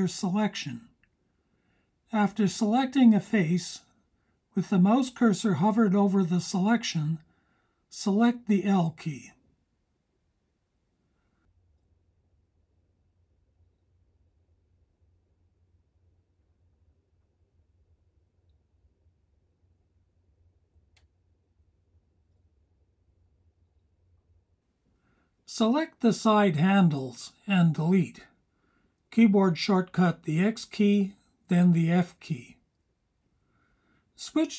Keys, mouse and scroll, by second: 12.1 h, 13.8-14.3 scroll up 3, 16.1-19.4 drag, 20.9 h, 24.5-29.4 drag, 28.5 x, 30.8-34.5 alt+super+drag.